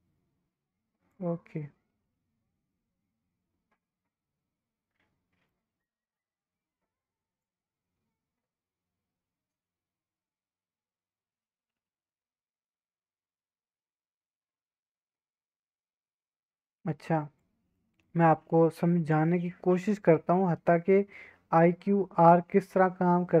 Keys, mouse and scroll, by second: 1.6-5.5 middle drag, 5.5 scroll down 1, 5.8 middle click, 6.2-7.4 scroll up 1, 7.4-17.4 drag, 17.7-18.0 middle drag, 18.3-21.5 middle drag, 21.6-22.5 middle drag.